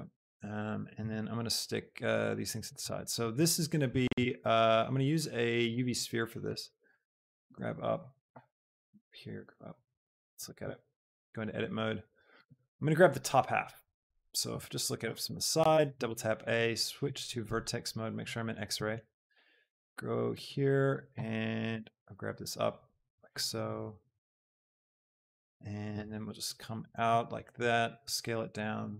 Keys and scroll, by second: 1.2 Tab, 4.1 shift+a, 6.7 s, 7.0 g, 7.4 z, 9.2 shift+g, 11.1 shift+Tab, 15.5 a, 15.5 KP_1, 15.8 b, 21.7 z, 23.5 shift+g, 26.1 shift+Tab, 27.9 shift+s.